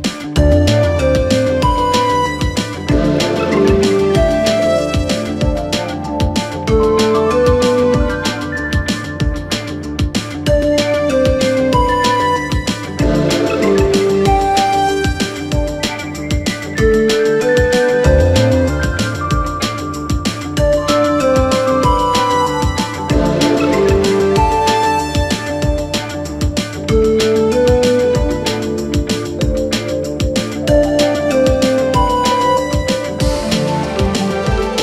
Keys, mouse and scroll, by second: 0.4 KP_3, 1.4 KP_1, 3.0-4.4 drag, 4.9-5.7 scroll up 1, 5.7 s, 9.5 click, 10.0 scroll down 2, 10.2-13.3 middle drag, 14.1 KP_1, 15.6 click, 16.5 scroll down 2, 16.7 Tab, 17.0-17.5 scroll up 3, 17.5 shift+middle click, 18.0 scroll up 1, 18.3 scroll down 2, 18.5 Tab, 19.2 shift+middle click, 20.0 Tab, 20.4 scroll down 2, 20.8-22.2 shift+middle drag, 22.2 KP_Divide, 22.5 KP_1, 23.3-24.8 scroll down 2, 24.8 click, 25.4-25.9 scroll down 2, 27.0-28.9 drag, 28.9-30.1 scroll down 3, 30.1 Tab, 30.5-31.3 scroll down 2, 31.3 r, 33.3 scroll down 2, 33.5 s, 34.2 s, 34.6-34.8 scroll up 2.